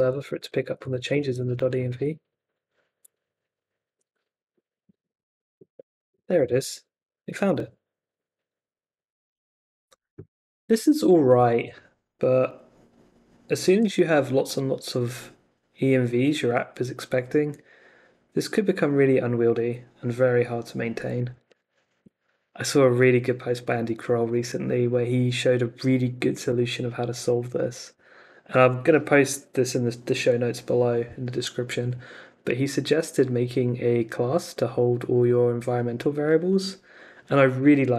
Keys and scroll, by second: 0.7 Up, 1.1 Return, 3.8 super+Tab, 4.3 super+r, 21.5 super+Tab.